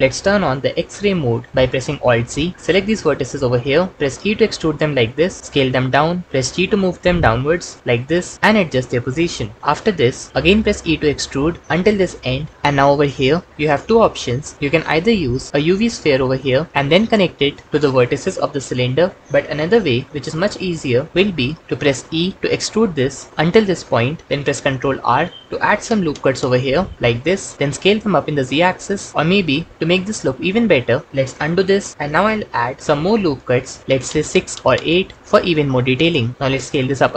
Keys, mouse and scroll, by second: 1.9 alt+z, 3.9 e, 5.4 s, 6.2 g, 9.6 g, 10.3 s, 10.8 e, 21.8 e, 24.6 ctrl+r, 27.2 Escape, 27.5 s, 27.6 z, 29.7 Escape, 31.4 ctrl+z, 31.9 ctrl+r, 35.2 Return, 35.9 Escape, 36.6 s, 36.7 z.